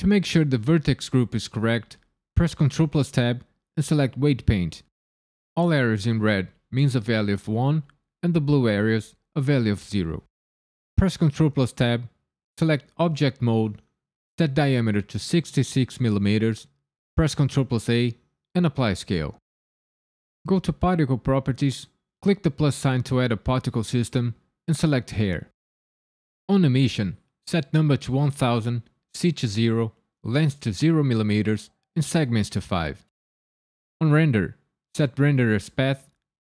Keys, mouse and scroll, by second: 2.3 ctrl+Tab, 10.9 ctrl+Tab, 14.2 click, 15.4 KP_6, 17.3 ctrl+a, 20.8 click, 22.3 click, 25.0 click, 28.9 click, 34.0 click.